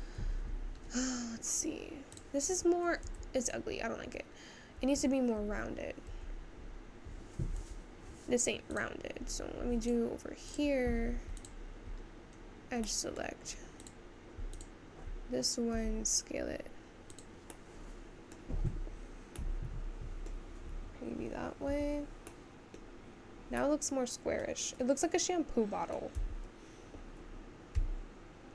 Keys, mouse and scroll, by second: 4.3 Tab, 8.7 Tab, 8.9 click, 15.8 s, 27.3 Tab.